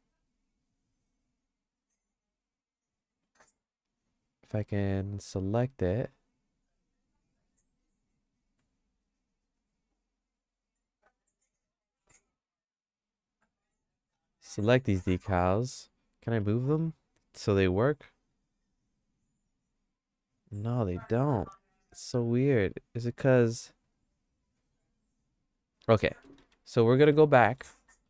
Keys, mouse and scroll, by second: 2.6 click, 4.4 right click, 5.8 right click, 10.0 click, 11.3 click, 12.7 click, 13.7-15.0 right drag, 16.7 g, 26.4 ctrl+z, 26.7 ctrl+z, 27.0 ctrl+z, 27.3 ctrl+z, 27.6 ctrl+z, 27.9 ctrl+z.